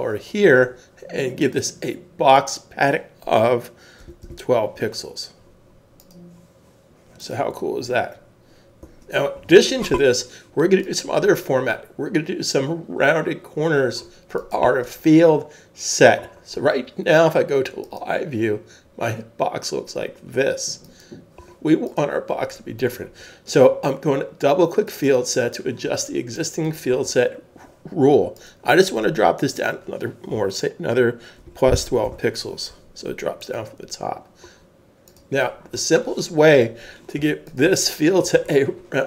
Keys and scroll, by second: 4.0 typing, 5.9 typing, 9.0 super+s, 31.9 typing, 33.9 typing, 37.2 super+s.